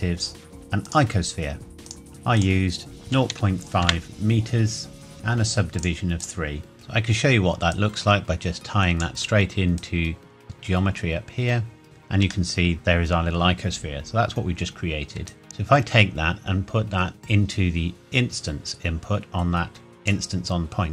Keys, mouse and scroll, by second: 0.8 click, 2.0-2.4 scroll up 1, 2.4 click, 3.0 KP_Decimal, 3.3 KP_5, 3.8 KP_Enter, 5.8 click, 6.7 middle click, 7.7 click, 11.8-12.2 scroll up 1, 12.5 shift+middle click, 12.7-13.4 shift+scroll up 1, 15.2 ctrl+shift+Num_Lock, 15.2 shift+scroll up 1, 15.3 ctrl+shift+right click, 15.4 click.